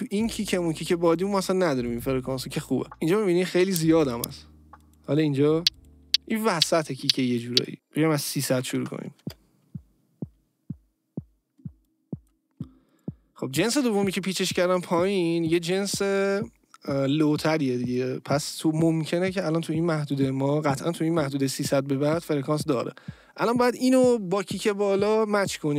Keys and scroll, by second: 7.7 space, 8.7 Return, 9.2 space.